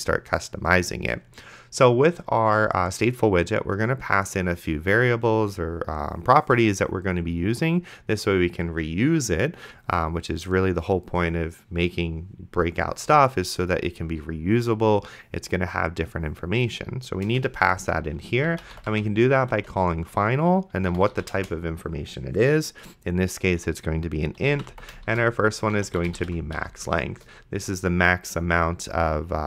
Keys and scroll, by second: 17.5 Return, 18.3-19.5 typing, 20.9 i, 21.1 t, 21.4 space, 24.2-27.1 typing, 27.1 Return.